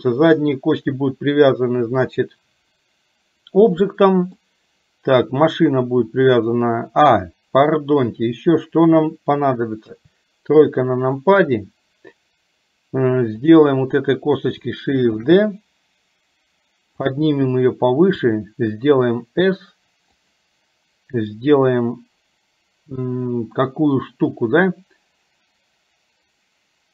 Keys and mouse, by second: 3.8 middle click, 7.2 middle click, 9.8 KP_3, 15.3 shift+d, 18.2 s.